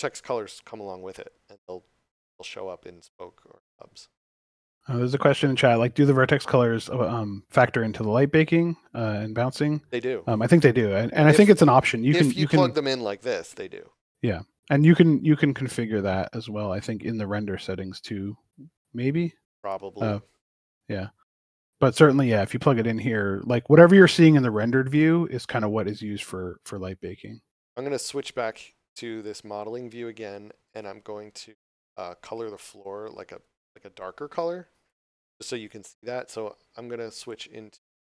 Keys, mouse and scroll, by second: 4.7 click, 15.6 click, 27.3 click, 30.5 click, 31.8 shift+middle click, 34.2 Tab, 37.1 click.